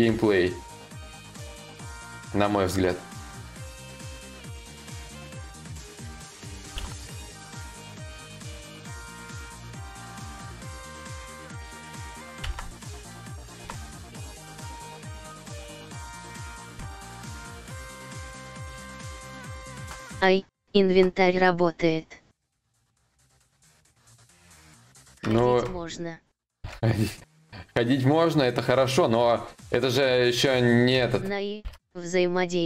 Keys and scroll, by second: 6.4 ctrl+z, 6.4 y, 12.1 ctrl+z, 13.1 ctrl+z, 20.5 ctrl+z, 23.5 ctrl+z, 25.0 ctrl+z, 26.2 ctrl+z, 31.3 ctrl+z, 31.3 y.